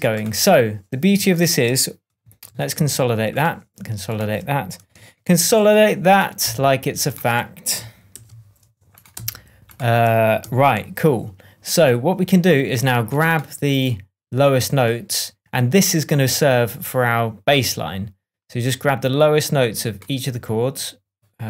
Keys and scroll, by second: 2.4 shift+super+j, 5.2 shift+super+j, 8.1 shift+super+j, 9.1 shift+super+j, 10.7 shift+super+j.